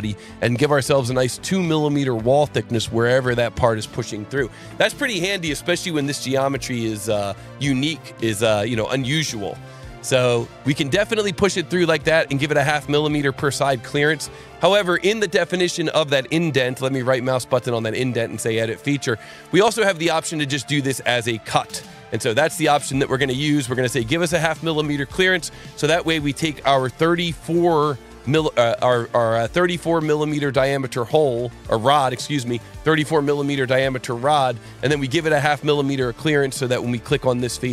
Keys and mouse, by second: 15.4 right click, 16.8 click, 21.6 click, 23.9 click, 25.5 click, 27.5 click, 30.3 click, 30.8 click, 31.7 alt+1, 32.8 shift+click, 34.3 ctrl+alt+1, 34.9 click, 35.6 click, 37.2 click.